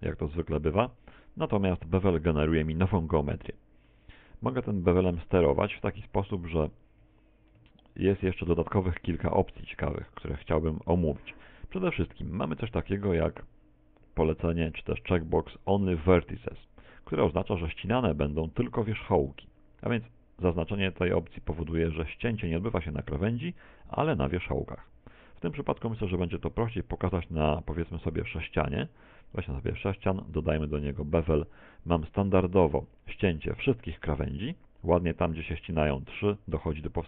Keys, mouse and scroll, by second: 0.6 a, 0.8 z, 1.2 middle click, 2.2 middle click, 4.5 middle click, 4.8 click, 19.2 click, 21.8 middle click, 25.8 Tab, 26.1-27.3 scroll down 3, 27.3 scroll down 1, 27.3 2, 27.7 shift+a, 29.4 middle click, 30.3 click, 34.8-36.4 scroll up 5, 36.6 middle click.